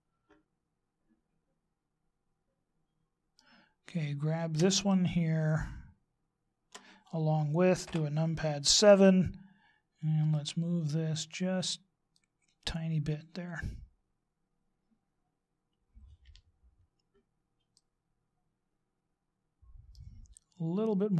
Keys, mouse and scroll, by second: 6.2 shift+right click, 7.8 KP_7, 10.3 click, 16.2 KP_1, 17.7 middle click.